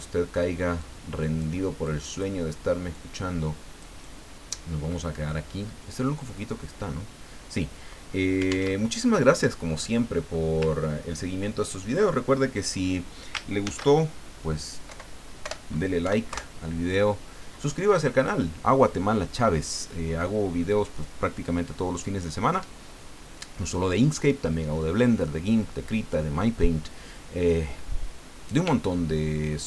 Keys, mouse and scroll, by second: 0.8 click, 2.0 click, 2.9-4.7 drag, 4.9-6.1 scroll down 5, 8.7 alt+Tab, 9.9 click, 11.1-11.5 ctrl+scroll up 2, 13.6 ctrl+shift+s, 14.9 Right, 15.4 BackSpace, 16.0 KP_6, 16.3 KP_Enter.